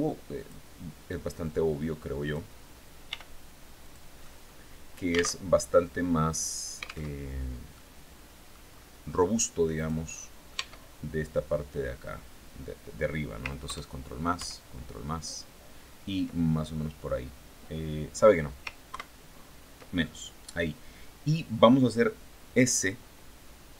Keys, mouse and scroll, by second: 0.9-2.0 drag, 2.5 r, 3.3 click, 3.7 middle click, 4.9 alt+Tab, 6.5 alt+Tab, 7.2 middle click, 9.2 right click, 10.0 Tab, 13.1 ctrl+KP_Add, 13.8 ctrl+KP_Add, 18.3 ctrl+KP_Subtract, 23.6 s.